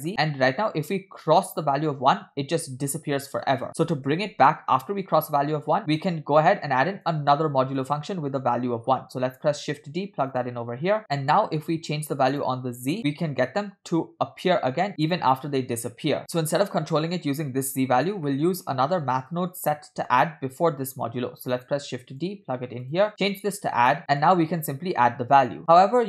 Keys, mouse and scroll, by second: 1.3-3.3 shift+drag, 3.4 shift+click, 5.8-6.1 drag, 5.8 scroll down 2, 6.5-7.2 drag, 7.5 scroll up 2, 7.8 click, 9.7 shift+d, 11.1 click, 11.1 middle click, 11.1-11.7 scroll up 3, 12.3 shift+click, 12.9-16.2 shift+drag, 18.3 middle click, 19.2 click, 19.5-20.1 drag, 21.5 shift+d, 22.9-23.9 drag, 24.2-26.0 shift+drag.